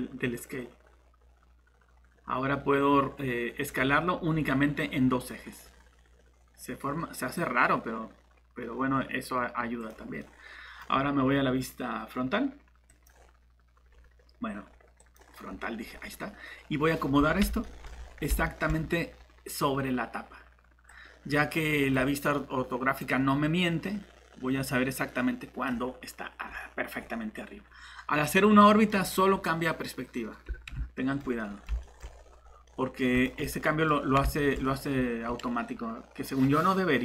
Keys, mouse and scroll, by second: 9.8 click, 10.2 middle click, 12.9 click, 15.8 scroll up 1, 17.6 shift+middle click, 17.9 scroll up 1, 18.5 middle click, 20.9 click, 26.4 scroll down 1, 28.3 middle click, 32.1 scroll up 1, 32.6 middle click, 33.1 click, 33.4 scroll up 1, 33.4 middle click, 33.9 scroll down 1, 34.4 middle click.